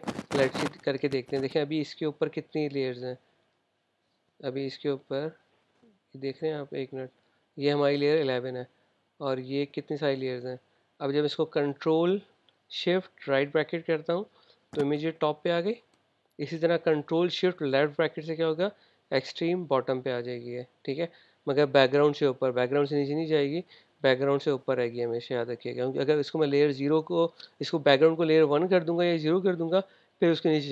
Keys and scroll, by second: 14.2 shift+super+}, 18.5 shift+super+{.